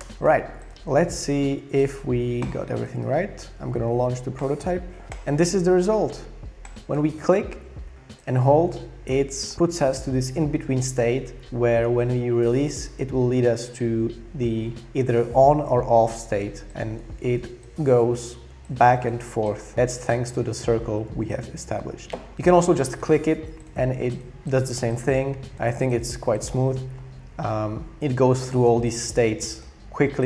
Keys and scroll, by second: 0.0-0.9 typing.